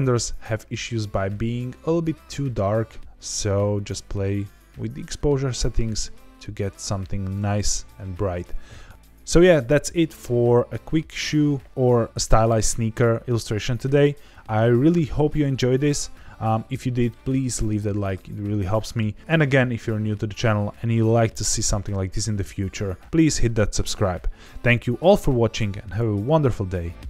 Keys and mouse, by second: 3.7 click.